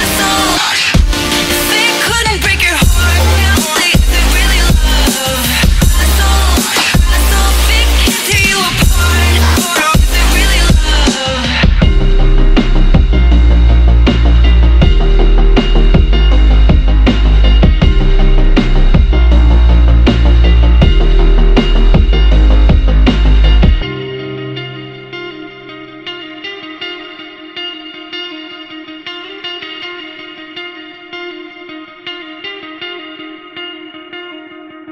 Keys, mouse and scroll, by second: 0.0 click, 0.5 click, 1.2 alt+click, 1.3 alt+right drag, 1.5-2.4 alt+drag, 2.9-3.9 drag, 3.9 alt+right click, 4.0-6.8 alt+drag, 7.1 alt+click, 7.6 alt+middle click, 7.7-8.3 alt+drag, 8.3 alt+middle click, 8.4 alt+click, 9.0 alt+right click, 9.1 alt+click, 9.4-10.7 alt+right drag, 10.7 click, 11.3 click, 11.8 Tab, 11.9 scroll down 2, 12.0 alt+click, 12.1 alt+right click, 12.2 alt+drag, 12.8 ctrl+z, 13.0 click, 13.1 click, 13.7 ctrl+j, 13.9 click, 14.1 click, 15.2 alt+right click, 15.3 alt+click, 15.9 Tab, 16.2 Left, 16.3 scroll up 1, 16.7 l, 16.9 alt+click, 17.2 alt+middle click, 17.3 alt+right click, 17.4 alt+click, 17.6 alt+right click, 18.4 alt+middle click, 19.2 click, 19.4 l, 19.9 z, 20.0 scroll up 4, 20.3 alt+middle click, 21.0 click, 21.9 alt+click, 22.1 alt+right click, 22.3-23.3 alt+middle drag, 23.3 z, 23.7 Tab, 23.8 alt+drag, 24.1 alt+right click, 24.2 alt+middle click, 24.5 alt+click, 25.0 Tab, 26.3 shift+s, 26.6 Tab, 26.7 alt+click, 27.2 alt+g, 27.7 click, 28.0 alt+g, 28.6 click, 29.2 click, 29.9 alt+right drag, 29.9 alt+drag, 30.1 alt+right click, 30.1 alt+click, 30.6 shift+a, 30.8-31.1 scroll down 9, 31.1 s, 31.5 alt+drag, 31.7 alt+right click, 31.8 alt+click, 32.6 alt+right click, 32.7-33.1 alt+drag, 33.1 alt+right click, 34.1-34.5 scroll up 7, 34.5 click.